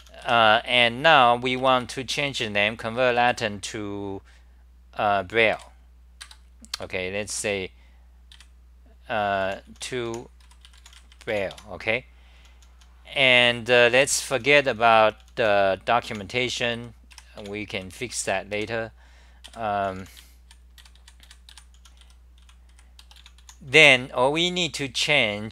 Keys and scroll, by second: 1.6 Return, 1.8 Return, 2.4-3.3 typing, 5.6 3, 6.2 ctrl+g, 6.8 ., 8.3 ., 9.5 u, 11.6 Home, 12.4-25.5 typing.